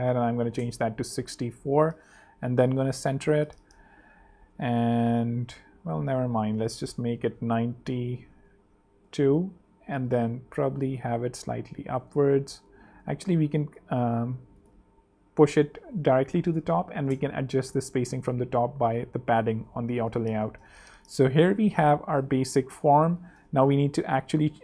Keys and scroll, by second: 0.0-0.9 typing, 1.1 super+3, 1.6 super+2, 1.9 alt+super+v, 2.5 alt+v, 2.6 alt+super+3, 4.4 super+2, 5.4 super+z, 7.7 9, 8.3 super+9, 9.1 2, 9.2 Page_Up, 10.1 shift+Page_Up, 16.4-17.3 typing, 17.8 super+Return, 18.0 super+3, 19.1 super+2, 20.3 alt+z, 20.6 alt+space, 21.4 space, 21.9 z, 23.1 space, 23.6 z.